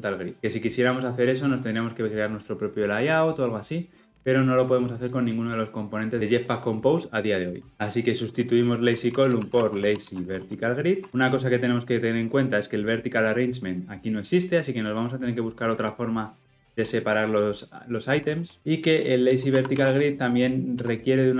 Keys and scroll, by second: 11.0 Tab, 20.8 Return.